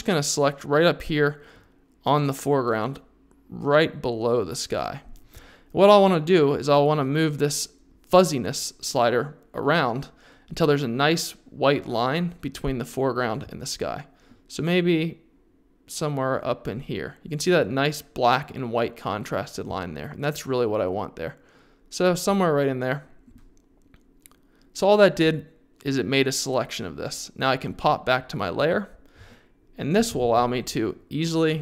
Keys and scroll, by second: 30.2 super+z.